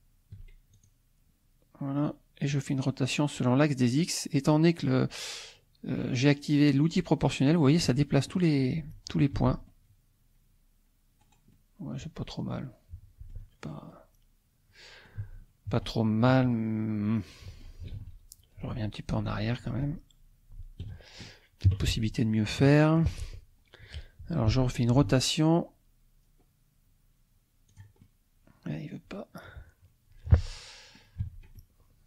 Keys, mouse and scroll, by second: 0.7 shift+click, 2.5-8.0 drag, 8.4-9.4 middle drag, 9.4 Tab, 9.7-11.4 middle drag, 11.5-13.5 middle drag, 13.9-15.2 middle drag, 15.2 Tab, 16.5-17.8 drag, 16.9 middle click, 18.0 ctrl+z, 20.9 ctrl+click, 21.7 KP_3, 22.6 shift+click, 24.9 r, 26.2-27.5 scroll down 2, 27.7 click, 28.0 click, 28.1-31.1 middle drag, 31.2 Tab, 31.5-32.0 drag.